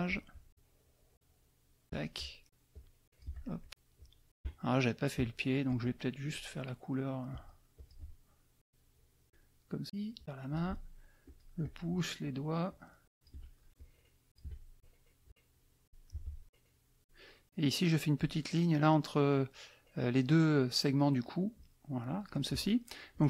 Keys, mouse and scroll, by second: 0.5-1.9 shift+drag, 2.0 shift+middle click, 2.7 shift+click, 3.9 shift+click, 4.6 shift+middle click, 5.3 shift+click, 6.2 shift+click, 6.6 shift+click, 6.9-8.0 shift+drag, 8.6 shift+click, 9.8 shift+click, 10.8 shift+click, 11.6 shift+click, 12.6 shift+middle click, 13.1 shift+click, 13.4 shift+middle click, 13.8-14.8 shift+drag, 14.5 shift+middle click, 15.2 shift+click, 16.4 shift+click, 21.5 shift+click.